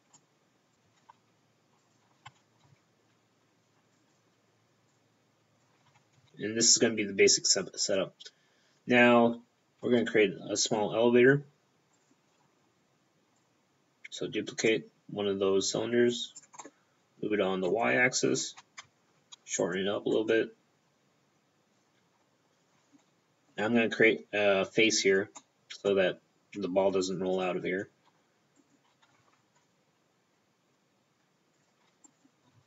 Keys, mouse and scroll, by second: 0.1 click, 0.9 shift+middle click, 1.1 shift+d, 1.9 click, 2.3 r, 2.7 x, 4.0 click, 5.0 click, 5.9 r, 6.2 x, 6.3 middle click, 6.3-6.8 scroll down 2, 8.0-8.7 scroll down 1, 8.7-9.6 scroll down 4, 9.6-9.9 scroll up 1, 9.9 shift+d, 12.0 right click, 13.4 click, 16.7 middle click, 16.8 middle click, 17.7 middle click, 18.9 Tab, 19.7 right click, 20.2 click, 22.8 scroll up 4, 23.1 middle click, 23.5 scroll down 1, 24.3-25.4 scroll down 1, 25.4 middle click, 25.4 scroll down 2, 27.4-28.6 scroll up 1, 28.8 right click, 29.3 ctrl+Tab, 31.6 click, 32.1 right click.